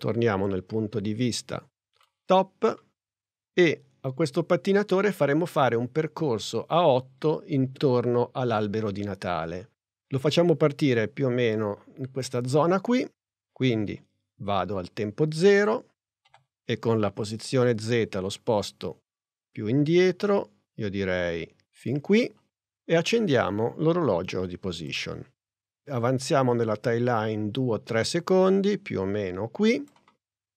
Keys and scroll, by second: 16.3 p.